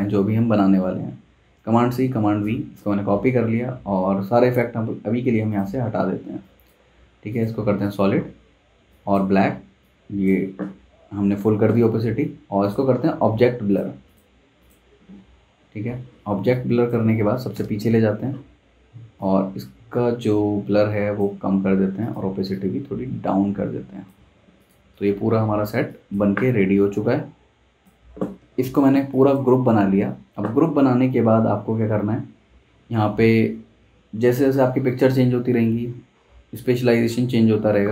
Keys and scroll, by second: 1.6 super+c, 2.0 super+v, 3.0 super+z, 17.0 super+z, 17.5 shift+super+[, 26.3 super+z, 28.4 super+g, 29.5 super+z.